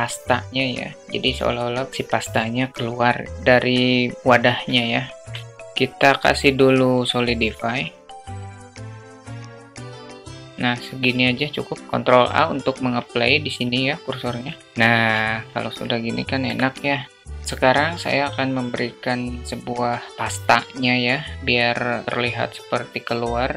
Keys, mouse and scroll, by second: 5.3 middle click, 8.3-8.7 drag, 9.6-11.6 drag, 11.8 ctrl+a, 12.2 ctrl+z, 14.7 /, 15.1 click, 15.6-16.0 alt+shift+middle drag, 16.7 middle click.